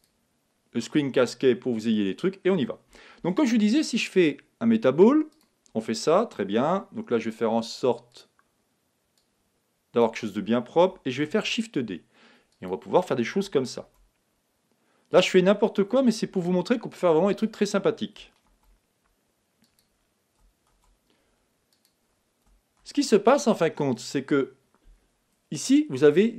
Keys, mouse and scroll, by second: 2.2-4.0 middle drag, 3.2 shift+a, 8.1-10.9 drag, 11.2 shift+d, 12.6-14.5 drag, 13.8 shift+d, 15.3-17.0 drag, 16.2 shift+d, 18.5 shift+d, 19.9-21.5 drag, 20.7 shift+d, 21.8-23.6 drag, 22.8 shift+d, 24.1-25.8 drag.